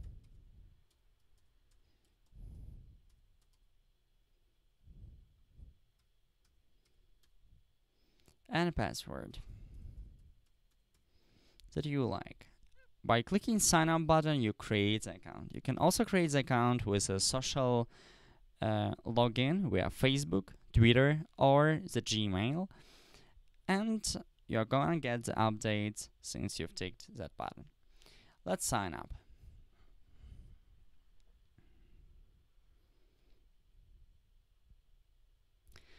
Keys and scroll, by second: 0.0-3.4 typing, 5.5-7.7 typing.